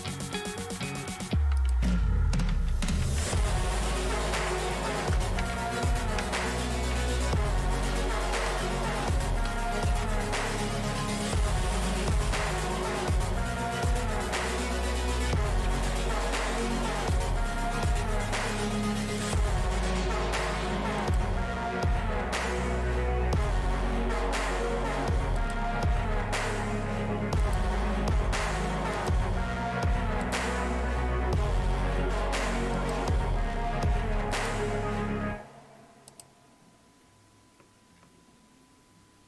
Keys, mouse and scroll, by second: 0.0 click, 1.6 click, 2.6-4.1 typing, 3.3 click, 4.9 click, 7.8-10.5 typing, 9.4 click, 19.0 click, 21.0 click, 27.4 click, 29.0 click, 30.2 click, 32.8 click.